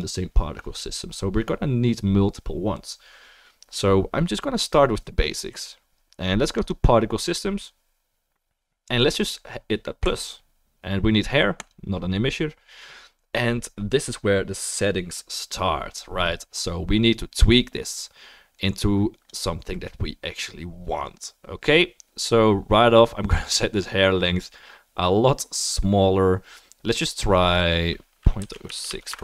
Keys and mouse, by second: 0.0-29.2 right drag, 10.1-11.7 drag, 10.1-29.2 middle drag, 18.6-29.2 drag.